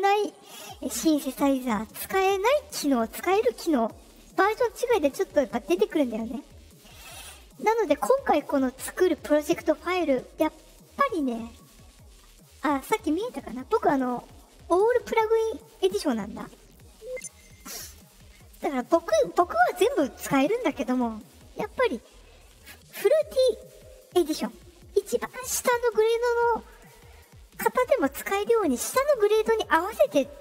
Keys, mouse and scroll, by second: 13.5 click, 15.7 click, 17.6 click, 17.7 click, 17.9 click, 18.8 click.